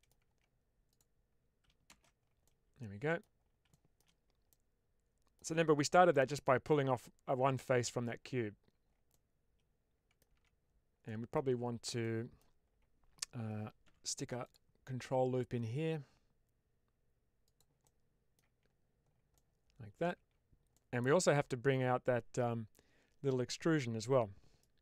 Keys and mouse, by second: 0.2 Tab, 0.8 click, 1.8 shift+space, 2.3-3.1 middle drag, 3.6-3.9 shift+middle drag, 4.4-5.2 middle drag, 5.8 middle click, 6.3 middle click, 9.0-10.1 middle drag, 10.2 Tab, 11.0 middle click, 11.9 middle click, 13.7 ctrl+r, 17.3 click, 17.8 middle click, 18.4 Tab, 19.2-20.0 middle drag, 20.0 Tab, 20.6 middle click.